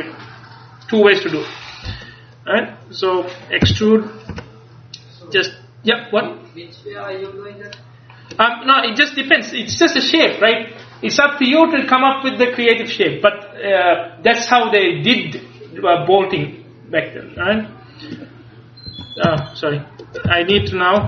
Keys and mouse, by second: 2.1-4.4 middle drag, 3.7 e, 5.5-6.6 drag, 17.5 Tab, 19.0 Escape, 19.4 Tab, 20.7 a.